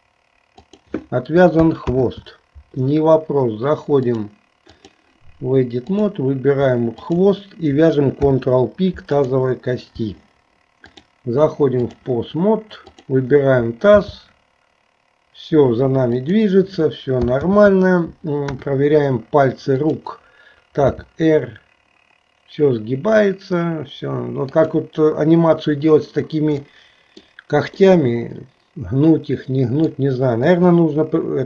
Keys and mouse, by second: 2.0 ctrl+z, 4.1-5.2 drag, 5.9 click, 7.1 shift+click, 8.2 ctrl+p, 10.9-12.1 drag, 14.0 g, 17.6 ctrl+z, 18.5 KP_1, 19.8 click, 21.0 r, 26.7 middle click, 28.0-30.1 middle drag, 30.5 KP_2.